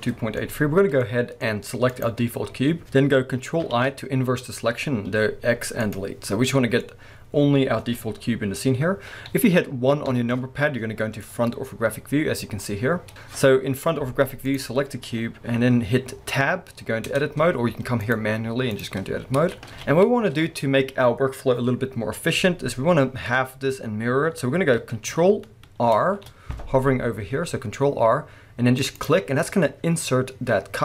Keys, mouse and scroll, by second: 1.9 click, 2.2-2.8 scroll up 1, 2.8-3.7 scroll down 1, 3.7 ctrl+i, 5.1 x, 6.5-14.5 middle drag, 7.3-10.1 scroll up 1, 10.1 KP_1, 12.8-14.5 scroll up 1, 14.5 click, 17.1 Tab, 18.0-29.1 drag, 19.2-19.7 scroll up 2, 19.7 alt+a, 20.0-21.4 scroll down 2, 21.4-22.9 scroll down 1, 22.9-25.9 scroll up 2, 25.9 ctrl+r, 29.4-30.8 middle drag.